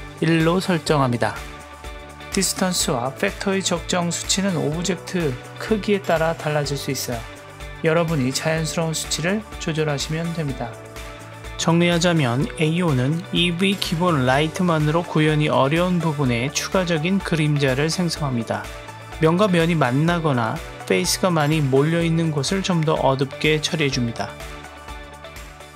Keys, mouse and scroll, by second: 1.3-2.5 drag, 3.5-7.4 middle drag, 8.2 click, 8.6 KP_0, 9.8 click, 10.1 click, 10.9-13.0 scroll up 1, 13.4 click, 15.9 click, 16.2 click, 16.5 click, 20.2 click, 24.2 click, 25.0 click.